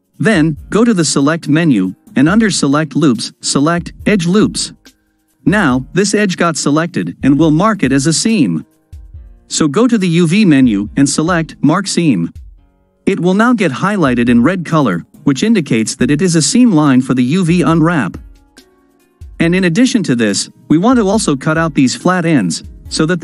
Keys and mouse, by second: 0.5-4.4 drag, 10.0-12.1 drag, 14.2 click, 17.8 ctrl+click, 18.7-20.8 drag, 23.0 click, 23.1-23.2 middle drag.